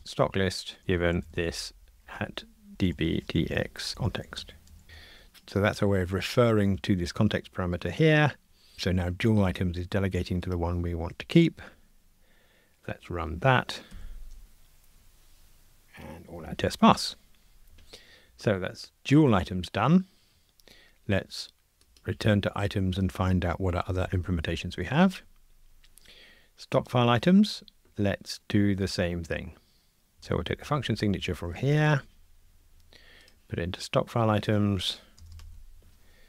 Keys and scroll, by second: 0.8 Return, 2.7 alt+shift+Left, 4.8 Escape, 14.0 ctrl+r, 24.1 super+b, 31.8 super+c.